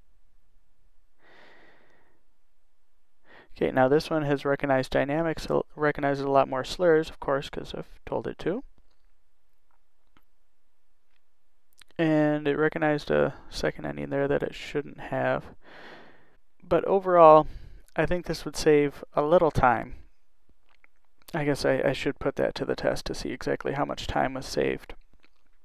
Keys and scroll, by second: 2.1 0.